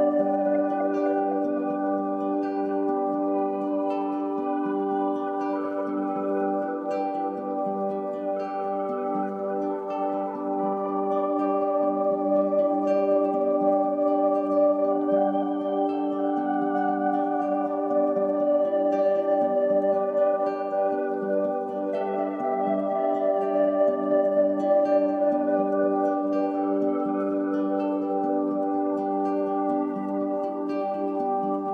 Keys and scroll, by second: 4.7 i, 10.3 a, 13.2 shift+Left, 17.7 shift+Right.